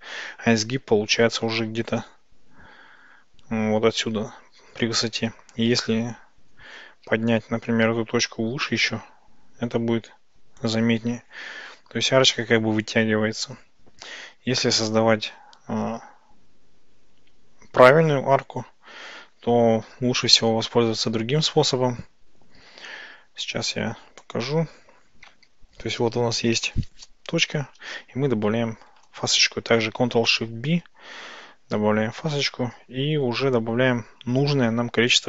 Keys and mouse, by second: 0.3 Tab, 7.1 g, 7.7 y, 10.7 click, 20.5 ctrl+z, 24.3 click, 28.9 ctrl+shift+b.